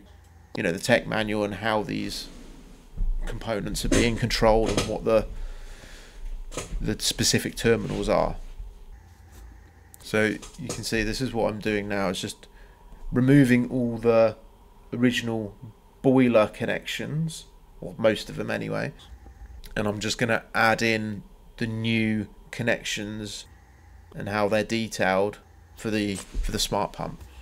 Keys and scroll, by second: 1.8 Escape, 5.7 c, 7.8 Escape, 9.0 Escape, 9.8 Delete, 11.1 Delete, 15.6 c, 16.2 Return, 24.1 Escape, 26.7 c, 27.3 Escape.